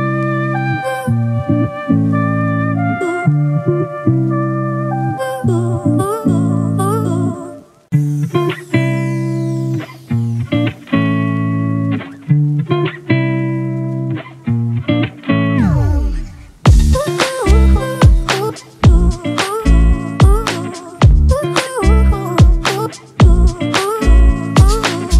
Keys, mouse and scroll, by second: 21.2 ctrl+=, 22.0 scroll down 1, 24.2 double click.